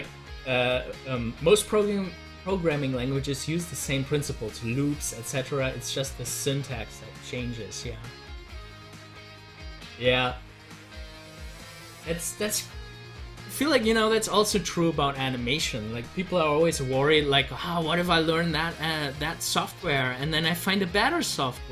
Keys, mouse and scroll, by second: 20.1 ctrl+z.